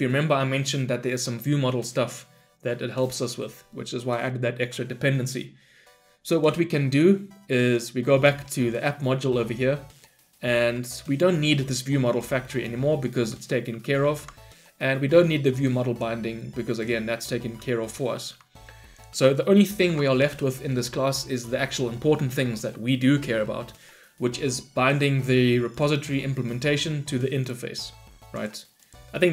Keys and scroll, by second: 13.7 ctrl+y, 19.7 ctrl+alt+l.